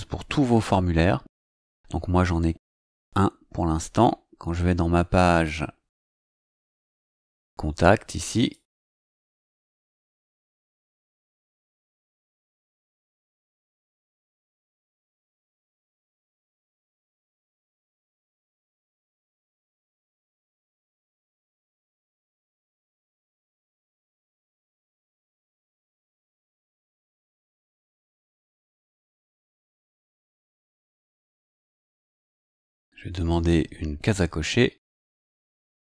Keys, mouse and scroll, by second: 1.3 click, 5.3 click, 8.3 click, 13.9 click, 21.0 click, 24.5 click, 26.9 click, 29.9-31.3 typing.